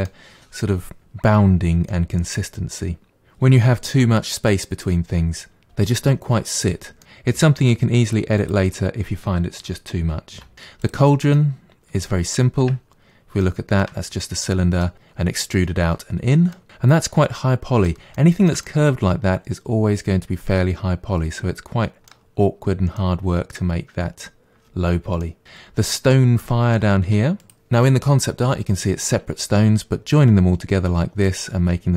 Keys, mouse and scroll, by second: 7.0-8.4 middle drag, 8.4 click, 9.7 g, 10.5 middle click, 10.8 click, 11.3-12.6 middle drag, 12.6 Tab, 13.0-13.4 scroll up 1, 13.4-21.7 shift+middle drag, 22.5-23.0 scroll down 1, 23.0 middle click, 23.9-25.2 scroll down 2, 25.2 middle click, 25.4-26.4 scroll up 9, 26.4 middle click, 27.1 Tab, 27.4 click.